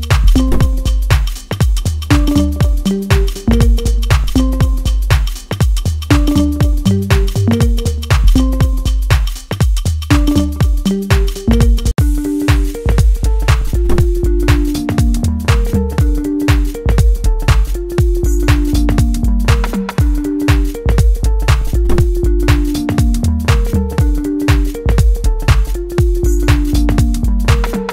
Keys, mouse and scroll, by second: 3.1 click, 3.4 Return, 6.4 click, 9.7 click, 10.0 Return, 12.7 click, 14.2 Return, 15.6 click, 17.9 Return, 19.0 click, 21.4 Return, 23.1 click, 25.8 Return, 26.5-27.9 middle drag.